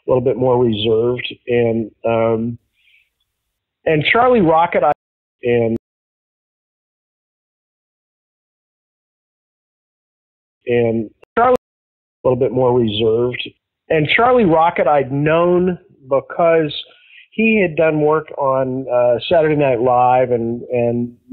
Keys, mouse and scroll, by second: 1.5 click, 2.7 click, 4.3 click, 4.8 space, 5.2 click, 5.3 space, 5.7 click, 7.2 click, 7.4 click, 8.6 click, 9.3-10.5 drag, 10.5 space, 11.2 ctrl+shift+Delete, 11.5 space, 12.1 click, 12.1 space, 14.8 ctrl+s, 19.5-21.1 drag.